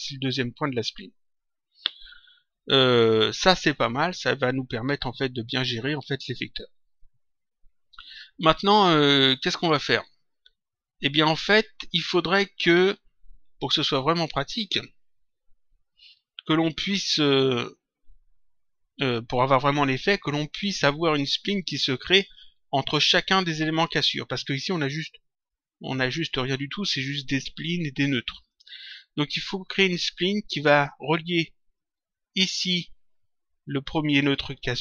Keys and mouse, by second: 24.7 click, 28.4 click.